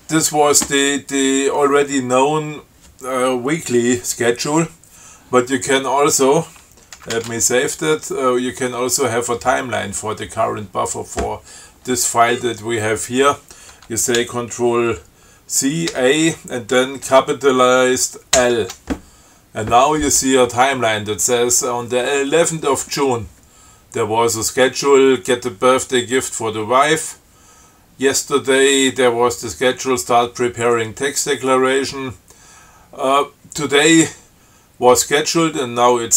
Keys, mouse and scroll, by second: 7.2 ctrl+x, 7.4 ctrl+s, 11.1 scroll up 2, 12.1-12.8 scroll up 4, 14.4 ctrl+c, 16.2 a, 18.6 shift+l.